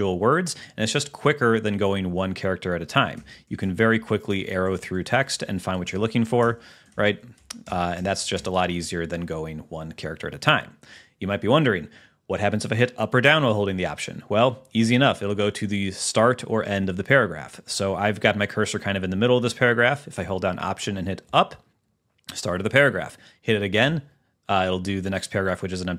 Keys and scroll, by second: 3.2 alt+Right, 5.8 alt+Left, 6.6 alt+Right, 7.0 alt+shift+Left, 7.5 alt+shift+Left, 7.8 alt+shift+Right, 17.9 Left, 21.3 alt+Up, 23.9 alt+Up.